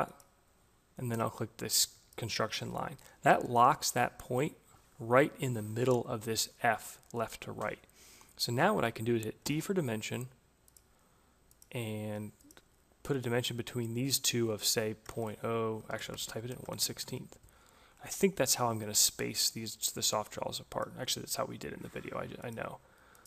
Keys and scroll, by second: 8.8 d, 14.4 0, 15.0 Delete, 15.8 shift+Left, 16.1-17.2 typing.